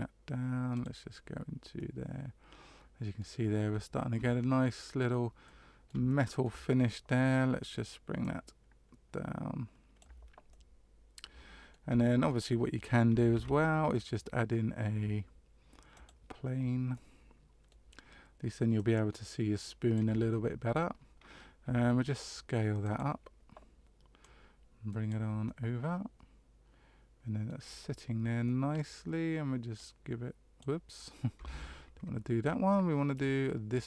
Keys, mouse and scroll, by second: 0.9 click, 1.8 middle click, 4.4-4.8 scroll down 1, 5.4 middle click, 6.1 shift+middle click, 8.2 click, 10.5 middle click, 12.0 shift+middle click, 13.3 shift+a, 16.9 middle click, 18.7 click, 20.3 shift+middle click, 21.6 s, 24.2 click, 25.4 middle click, 28.4 middle click, 29.7 click, 31.5 ctrl+z, 33.1 right click.